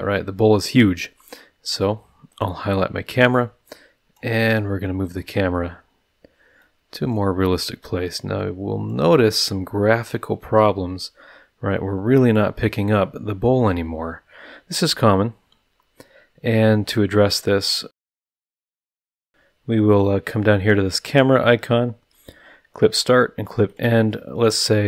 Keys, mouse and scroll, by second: 0.7 scroll up 1, 0.8 middle click, 1.3-1.9 scroll up 4, 2.3 click, 3.3 click, 4.5-4.8 scroll down 1, 4.9-5.4 middle drag, 5.5 middle drag, 6.6-7.3 drag, 7.8-9.1 drag, 10.1-12.5 drag, 19.9 click, 23.7 click.